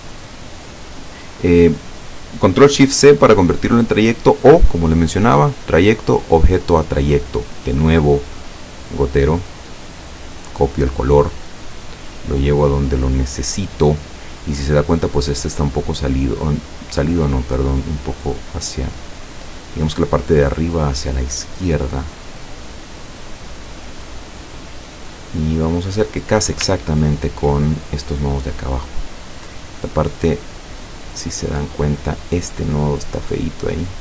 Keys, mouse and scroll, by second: 5.4 click, 6.2 click, 9.7 click, 10.2 click, 11.7 click, 12.4 click, 15.3 click, 17.0-19.6 drag, 20.4-26.6 drag, 26.9 ctrl+scroll up 1, 29.9 click, 30.9 click, 32.4-34.0 drag.